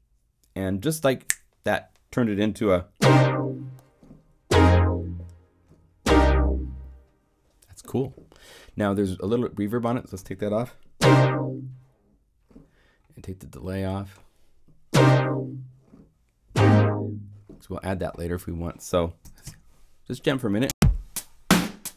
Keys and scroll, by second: 19.2 0, 20.6 Return.